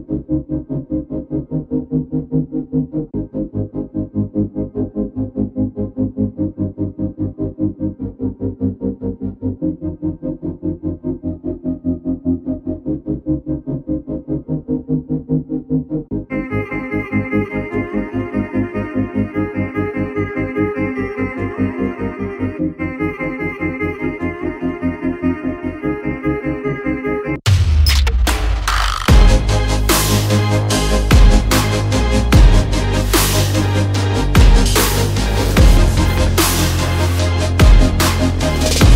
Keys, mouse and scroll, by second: 0.0 click, 0.5 alt+scroll up 1, 1.8 click, 2.3 alt+scroll down 1, 2.9 alt+scroll up 1, 4.2 click, 4.4 click, 4.5 alt+scroll up 1, 5.2 click, 7.0 double click, 7.3 click, 9.5 c, 9.9 a, 10.3 s, 11.0 t, 12.7 click, 17.0-19.0 typing, 19.8 click, 22.6 alt+scroll, 22.8 alt+scroll up 1, 23.3 click, 25.8 click, 25.9 alt+scroll down 1, 26.9 click, 28.5 alt+scroll, 28.5 alt+scroll down 1, 28.9 click, 29.8 alt+scroll up 1, 30.3 click, 32.2 click.